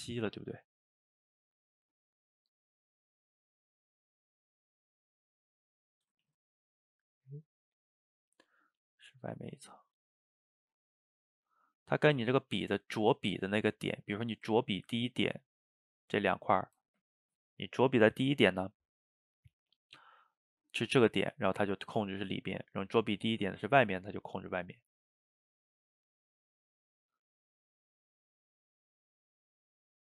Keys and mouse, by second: 1.2 click, 1.8 middle click, 2.5-3.8 drag, 3.8 middle click, 4.4 click, 4.9 middle click, 5.5 click, 5.8 middle click, 6.3 ctrl+z, 6.8 middle click, 7.6 click, 8.2 middle click, 9.1-14.0 drag, 14.0-18.5 middle drag, 19.0 click, 21.2-24.7 drag, 24.7 middle click, 25.4 click, 25.8 middle click, 26.4 click, 26.6 middle click, 27.6 click, 28.5 middle click, 29.4 click.